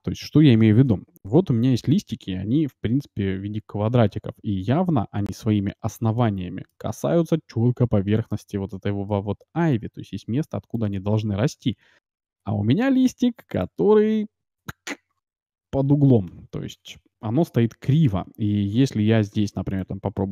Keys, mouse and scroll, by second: 0.0 click, 1.4 Tab, 4.6-7.1 middle drag, 8.3-10.0 middle drag, 10.5 middle click, 10.6 scroll down 1, 10.7-12.5 middle drag, 12.5 Tab, 13.5-15.4 drag, 15.2-17.1 middle drag, 16.3 Tab, 18.3 Tab, 19.7-20.3 drag.